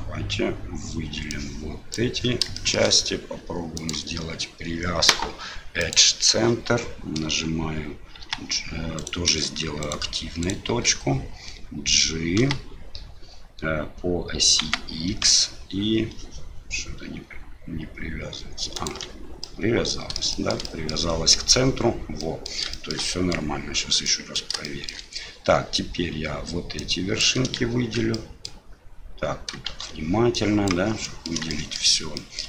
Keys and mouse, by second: 1.4 click, 2.5 shift+middle click, 3.9-6.3 drag, 9.8 shift+right click, 10.4 shift+right click, 12.4 g, 19.5 click, 20.4 shift+click, 20.7 click, 22.2 middle click, 22.8 shift+middle click, 23.1 middle click, 24.2 middle click, 24.7 shift+middle click, 26.9 click, 28.2 click, 29.7 shift+z, 30.4 click, 31.0 middle click, 31.5 shift+middle click, 32.2 middle click.